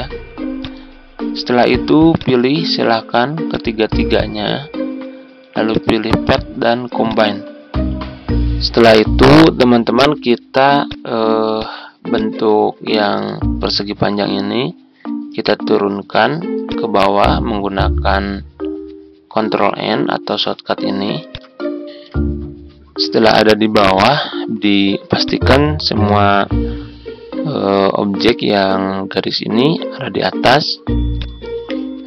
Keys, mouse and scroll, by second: 2.1 shift+click, 3.4 shift+click, 5.6 click, 12.9 ctrl+z, 13.4 ctrl+scroll down 1, 15.4 right click, 16.6-17.7 drag, 25.1 alt+click, 31.1 click.